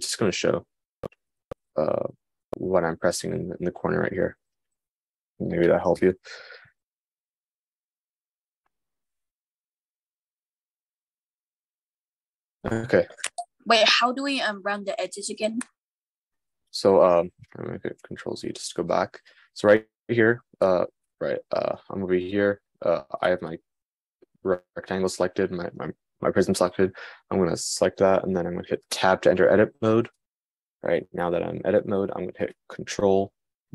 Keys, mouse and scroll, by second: 1.0-3.6 shift+drag, 3.6-11.7 shift+middle drag, 18.1 super+z, 21.5 Tab, 29.6 Tab, 30.1-33.7 middle drag.